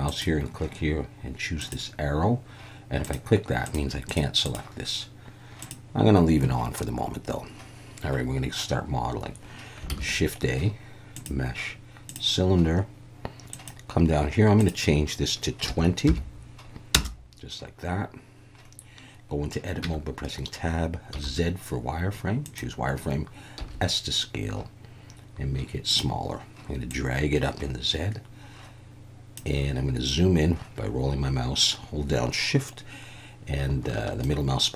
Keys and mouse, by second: 0.1-2.0 drag, 3.0 click, 3.7 click, 4.4 click, 5.6 click, 7.3 middle click, 8.2-8.9 middle drag, 9.9 shift+a, 13.5 click, 14.6 click, 19.8 Tab, 21.1 z, 23.6 s, 25.9 click, 26.9 click, 34.2-34.7 shift+middle drag.